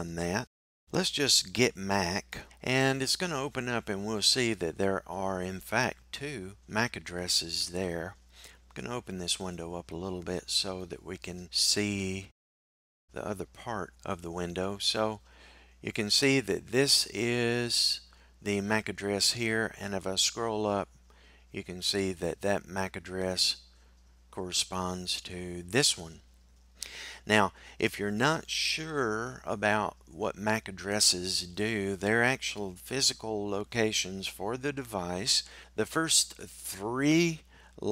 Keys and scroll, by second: 1.8 typing.